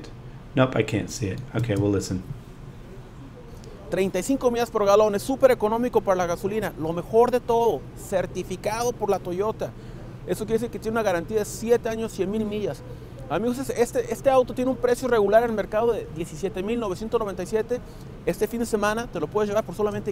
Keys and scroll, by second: 1.6 space.